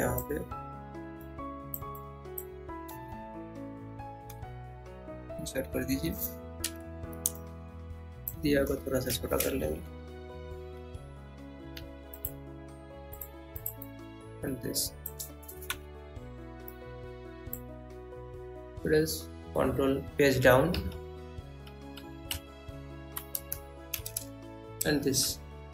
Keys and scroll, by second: 3.4 Down, 4.0 Left, 8.8 Right, 10.2 Up, 10.8 Down, 19.8 ctrl+Page_Down, 23.4 Left, 24.2 Right.